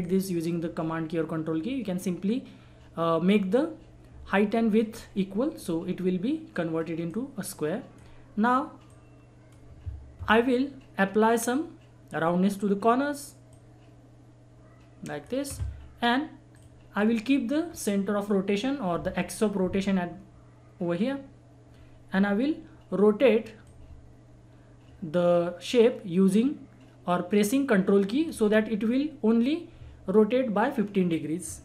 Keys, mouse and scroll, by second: 6.5-12.1 drag, 13.5-16.5 drag, 17.0-17.5 scroll up 1, 17.6-18.4 scroll down 1, 23.6-28.1 drag, 28.0 right click, 31.4 ctrl+Num_Lock, 31.4 ctrl+right click.